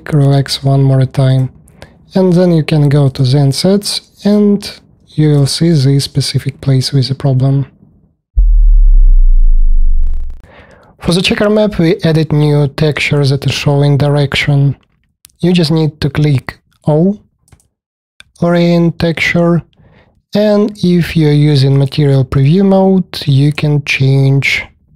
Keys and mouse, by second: 4.1 click, 5.3-7.6 alt+drag, 7.6 alt+middle click, 7.7 alt+click, 7.8 alt+middle click, 21.8 middle click, 23.3-24.9 drag.